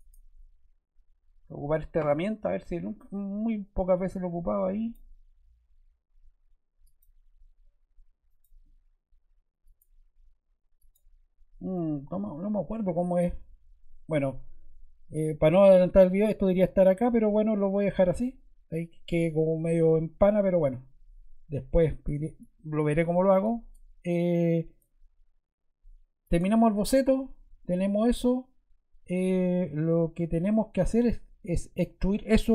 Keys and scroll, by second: 11.6 Escape.